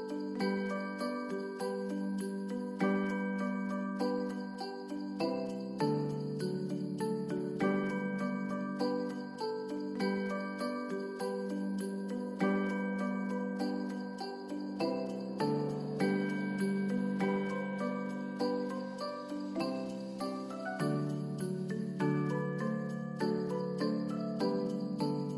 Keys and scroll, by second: 0.7 space, 5.6 space, 8.5 ctrl+s, 19.6 space, 21.5 space.